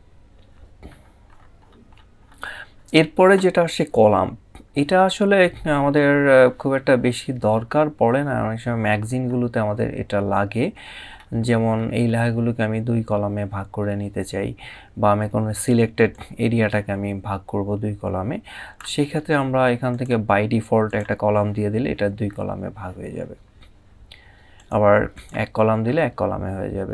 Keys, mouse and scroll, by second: 0.7 scroll up 1, 8.2 scroll down 1, 10.5 scroll up 1, 15.8 click, 24.2 click.